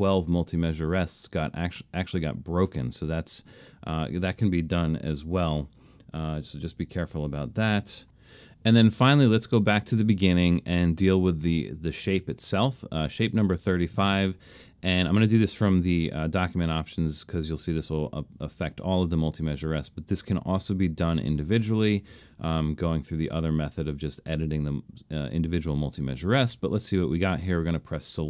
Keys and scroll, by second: 3.7 super+z, 7.0 alt+super+a.